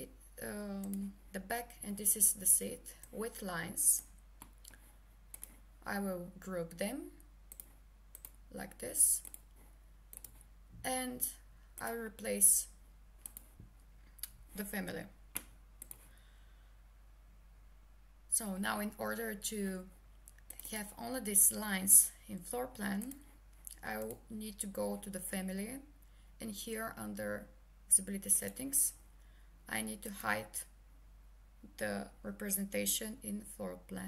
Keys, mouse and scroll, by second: 1.8 Escape, 3.0 click, 9.2 click, 15.8 click, 23.0 click.